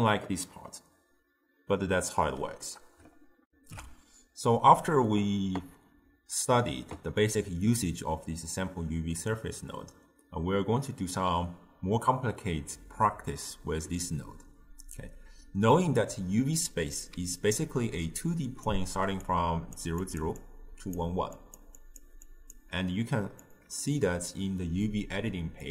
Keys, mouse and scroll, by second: 3.5 ctrl+alt+shift+q, 17.2 d, 17.4-18.8 right drag, 18.8-22.9 typing, 19.4 click, 20.1 click, 20.4-21.0 drag, 21.4 click, 21.9 click, 22.3 click, 23.5 click.